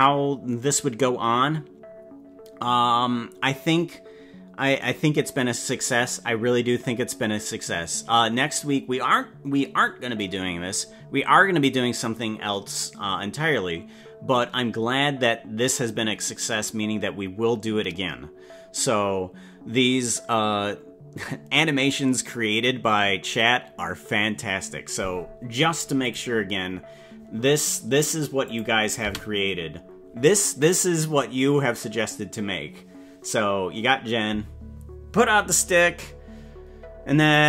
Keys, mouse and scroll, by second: 26.0 click, 28.4 click, 29.0 space.